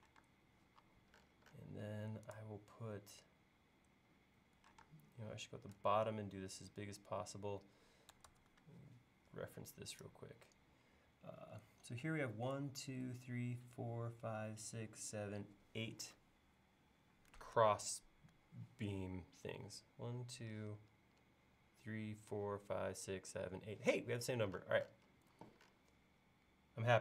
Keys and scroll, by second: 0.2 space, 0.8 l, 4.9 space, 8.3 super+Tab, 17.6 super+Tab, 25.4 l.